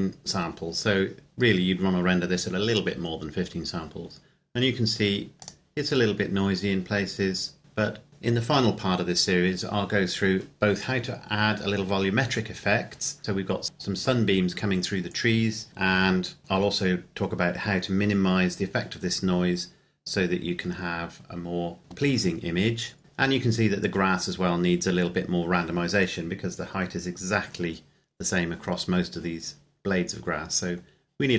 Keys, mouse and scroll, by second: 4.1-5.3 scroll up 1, 5.3 click, 5.8 scroll up 1, 7.6-8.0 scroll down 1, 24.8-26.6 scroll up 1, 30.1-30.6 scroll down 1.